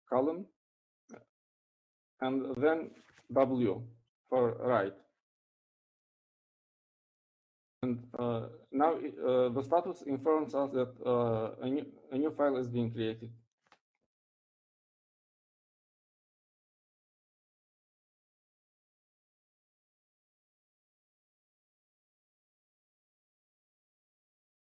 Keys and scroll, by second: 2.5 shift+;, 5.7 w.